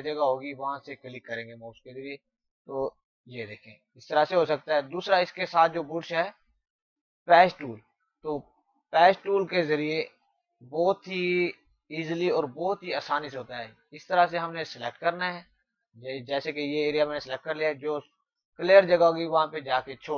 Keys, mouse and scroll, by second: 0.5 alt+click, 2.7 click.